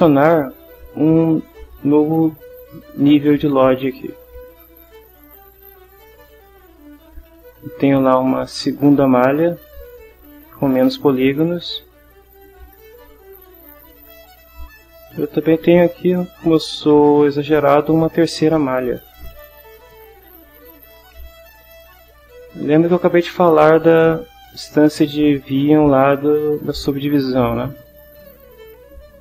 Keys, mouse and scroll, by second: 4.8 click, 5.8 click, 6.8 click, 9.6 click, 11.6 click, 13.4 click, 15.0 click, 16.1 click, 16.9 scroll down 1, 18.3 click, 19.8 click.